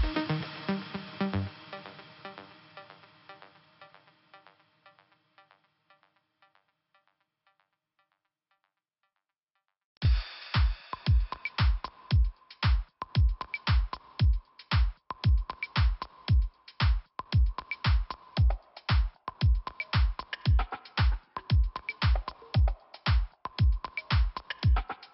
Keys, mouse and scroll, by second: 0.6 scroll down 1, 1.7 click, 6.0 scroll up 1, 7.1 click, 8.4-9.0 scroll up 1, 10.0 click, 11.3 click, 11.7 click, 12.9 click, 13.9 click, 14.5 click, 15.4 click, 15.7 click, 19.5 click, 23.6 scroll up 2, 24.7-25.1 scroll down 1.